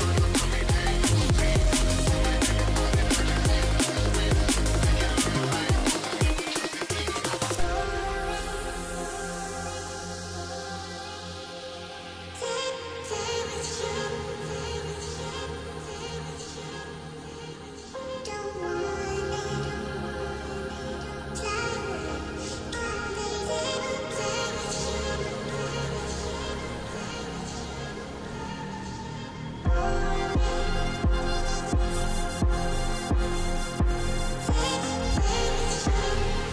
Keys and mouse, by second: 0.4 shift+middle click, 4.7-5.9 middle drag, 7.4 click, 7.7 click, 9.4 click, 9.8 s, 10.4 y, 12.0 s, 12.1 x, 13.4 click, 14.2 s, 14.5 y, 15.5 middle click, 16.1 middle click, 18.5-19.4 middle drag, 19.7 KP_0, 20.7-21.1 middle drag, 21.9 s, 22.0 x, 23.3 KP_0, 24.5-24.8 middle drag, 25.9 KP_0, 26.8-27.1 middle drag, 28.3 KP_0, 29.2 middle drag, 30.0 middle click, 31.3 KP_0, 32.2 click, 35.1-36.1 middle drag.